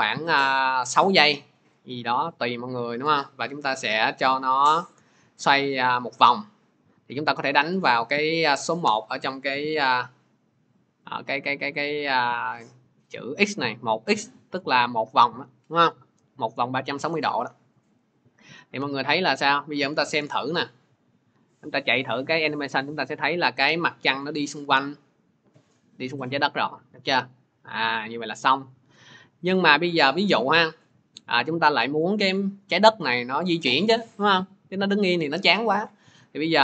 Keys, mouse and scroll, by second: 0.8 click, 7.4 click, 9.0 1, 9.8 click, 11.0 click, 18.4 click, 18.6 click, 29.6-35.9 drag.